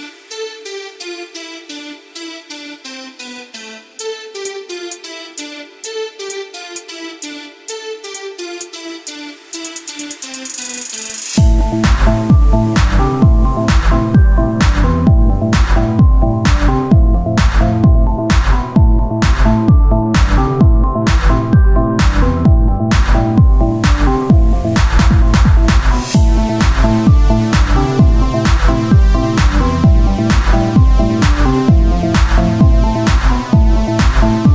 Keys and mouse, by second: 0.7 Tab, 6.7 t, 9.9-11.3 right drag, 11.3 t, 12.1-14.7 drag, 14.7 t, 19.2-21.1 right drag, 21.1 t, 21.7-23.8 drag, 24.6-26.5 right drag, 25.1-32.3 drag, 32.3-33.4 right drag.